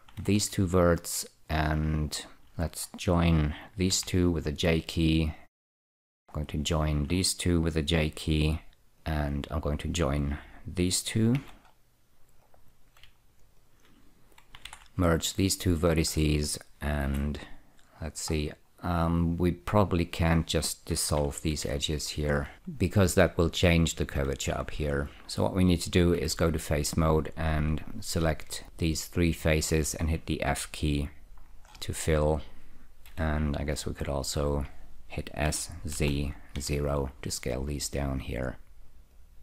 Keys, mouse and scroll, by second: 0.5 alt+y, 2.5 shift+click, 4.2 j, 5.7 click, 6.8 shift+click, 9.0 middle click, 9.3 click, 11.6 j, 11.7-12.7 scroll up 1, 12.7 click, 13.7 shift+click, 13.9 shift+click, 15.0 alt+y, 17.3 2, 18.6-19.7 scroll down 3, 19.8 click, 21.8 ctrl+x, 24.8 ctrl+z, 26.5 3, 27.8 click, 28.6 click, 29.1 shift+click, 29.9 shift+click, 30.4 click, 31.2 click, 31.8-33.4 scroll up 1, 33.4 1, 34.1 click, 35.7 s, 36.2 z, 36.9 0, 37.6 click.